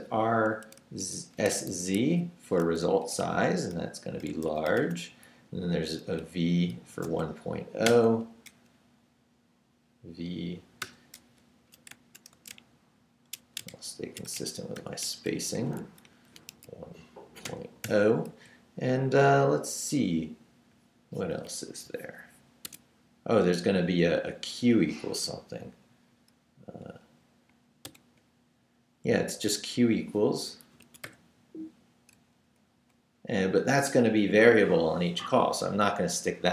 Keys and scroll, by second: 0.0-2.0 typing, 2.8 Right, 4.0-5.3 typing, 6.2 Right, 6.7-8.6 typing, 10.8 ', 12.3 shift+space, 13.4-15.3 typing, 16.0 Left, 16.5 i, 17.4 ., 17.8 0, 18.3 Right, 21.5 Down, 22.6 Escape, 27.8 shift+4, 30.8 Escape, 31.0 0, 32.8 Up.